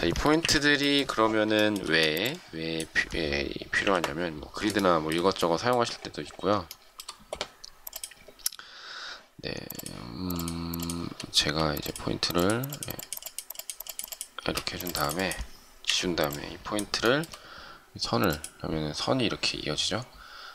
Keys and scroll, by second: 0.2 shift+Delete, 1.7 space, 3.5 Delete, 11.3 shift+space, 14.3 space, 16.8 shift+Delete.